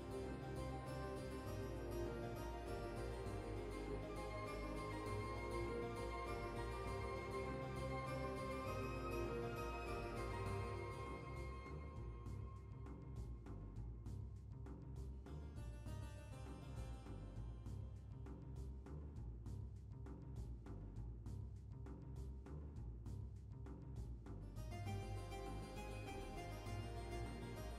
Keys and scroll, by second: 4.8 typing, 8.0 typing, 11.0 typing, 20.6 typing, 24.5 typing.